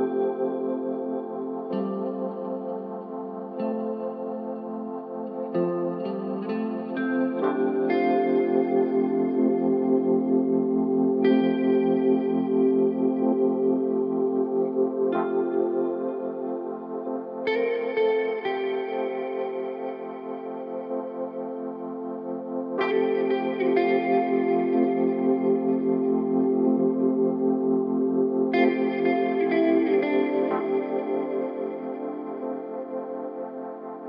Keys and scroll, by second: 3.1 ctrl+z, 3.3 Escape, 3.5 ctrl+z, 5.9 ], 7.4 ctrl+z, 8.5 ], 16.9 3, 21.4 2, 24.4 4, 26.0 1, 29.7 4.